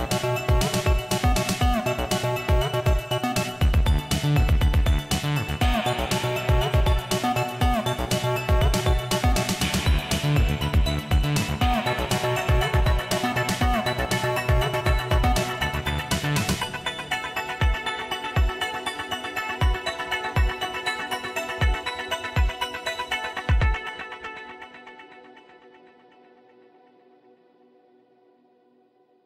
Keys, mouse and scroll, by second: 8.5 click, 12.5-14.0 drag, 17.5 click, 20.0 click, 22.7 click, 24.1 click, 25.4 click, 29.1 click.